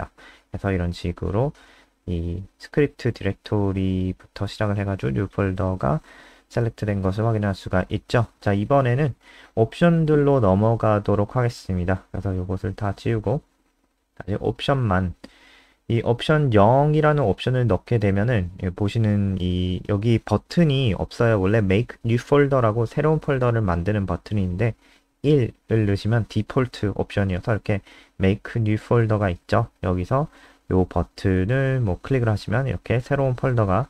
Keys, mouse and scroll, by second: 11.7 Up, 12.1 ctrl+Right, 12.2 ctrl+Right, 12.8 Right, 15.3 0, 16.5 ctrl+s, 16.8 F5, 21.3 click, 24.0 BackSpace, 24.5 1, 25.0 ctrl+s, 25.4 F5, 28.0-28.9 scroll down 4, 28.9 click, 29.8 scroll down 2, 31.7 click.